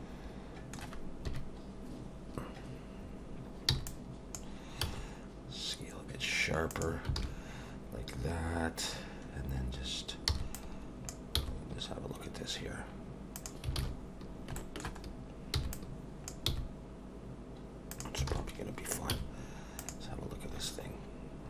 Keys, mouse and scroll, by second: 1.2 KP_1, 3.7 b, 4.8 s, 7.2 alt+a, 9.3-10.2 scroll up 1, 10.3 b, 11.4 g, 13.8 alt+a, 14.2 scroll down 1, 14.5 shift+middle click, 15.0-15.5 scroll up 2, 15.5 b, 16.5 g, 18.3 alt+a, 19.1 z, 20.5-21.3 scroll down 4.